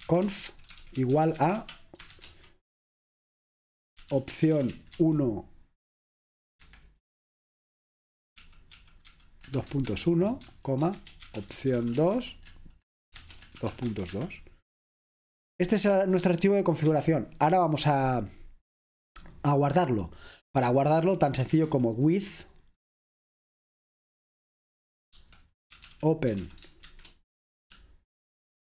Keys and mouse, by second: 0.0-2.2 typing, 3.9-5.5 typing, 6.7 Escape, 8.5-12.2 typing, 13.2-13.9 typing, 14.1 Escape, 17.0 0, 20.7-22.2 typing, 25.2-27.0 typing.